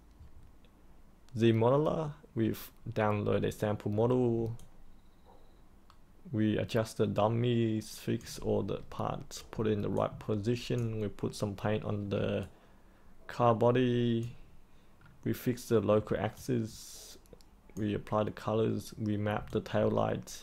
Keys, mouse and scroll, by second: 4.5-8.2 alt+drag, 9.9 alt+click, 12.4-14.2 alt+drag, 16.3 alt+click, 19.4-20.4 alt+drag.